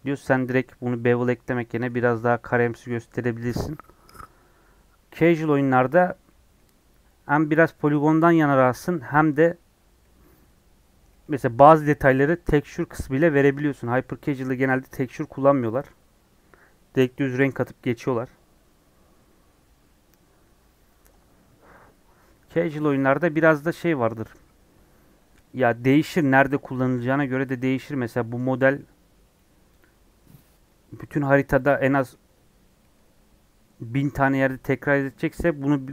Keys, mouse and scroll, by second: 5.3 scroll down 1, 5.5-6.6 middle drag, 6.6 scroll up 2, 23.7-24.7 scroll down 1.